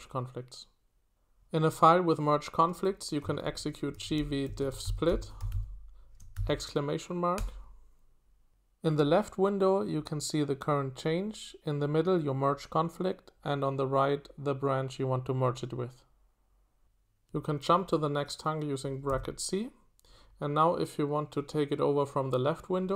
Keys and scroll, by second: 3.2-6.3 typing, 7.4 Return, 18.6-19.6 typing.